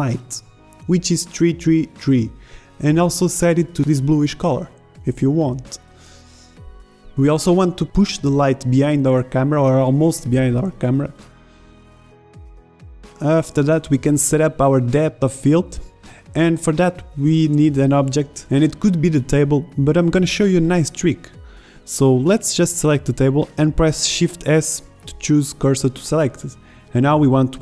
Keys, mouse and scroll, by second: 0.9 KP_3, 4.7 KP_0, 5.2 shift+z, 7.1 z, 8.1 shift+z, 10.1 middle click, 11.0 z, 11.8 middle click, 12.5 KP_0, 12.8 shift+z, 13.9 z, 15.7 middle drag, 19.8 KP_0, 23.5-24.4 right drag, 24.5-25.0 right drag, 25.0 shift+s.